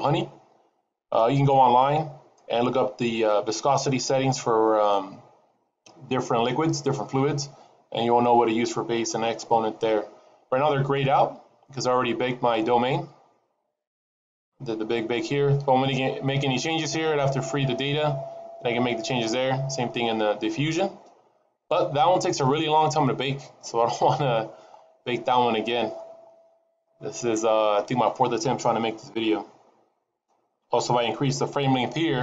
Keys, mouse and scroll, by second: 11.6-12.3 scroll up 6, 12.3-13.6 scroll up 17, 13.6-15.4 scroll up 6, 19.3-20.6 scroll down 20, 21.0-22.4 scroll down 14, 22.4-24.3 scroll up 19, 24.7-25.6 scroll up 10, 25.6-28.0 scroll down 37, 28.4-30.8 scroll down 4.